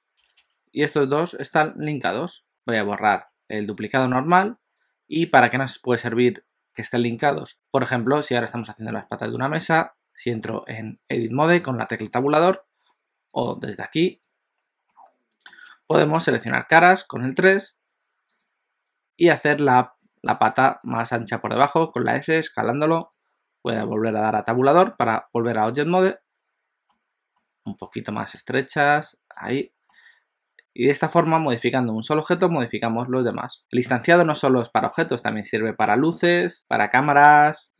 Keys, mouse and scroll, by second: 2.5 click, 5.2 click, 5.2 x, 9.0 middle click, 9.7 Tab, 13.3 click, 14.9 middle click, 16.0 3, 18.4 click, 19.0 s, 20.5 s, 25.0 Tab, 25.7 middle click, 27.4 middle click, 27.8 Tab, 28.4 s, 29.5 Tab, 29.9 middle click.